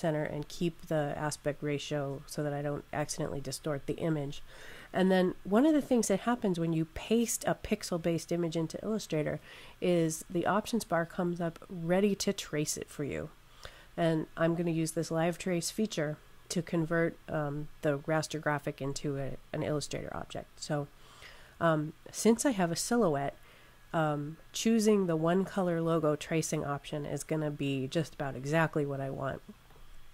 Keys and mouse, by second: 21.0 click, 29.5 click.